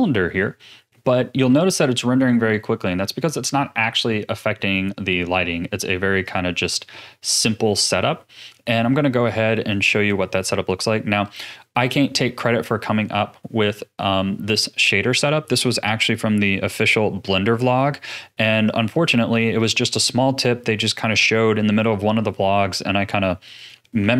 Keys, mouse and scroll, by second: 1.0 z, 6.2 click, 8.0-8.9 middle drag, 8.9-9.8 scroll down 2, 9.8-13.2 middle drag.